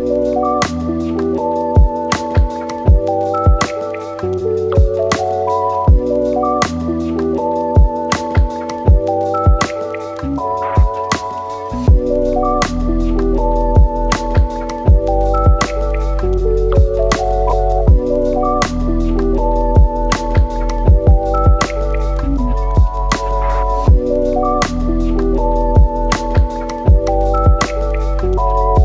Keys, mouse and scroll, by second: 0.5-1.4 drag, 3.6 shift+a, 6.1-6.8 drag, 10.3-13.8 drag, 14.5 click, 15.3-19.0 drag, 19.3-19.9 drag, 23.0-23.5 middle drag, 23.5 scroll up 3, 23.8-25.3 middle drag, 25.3-27.1 drag, 27.1 BackSpace.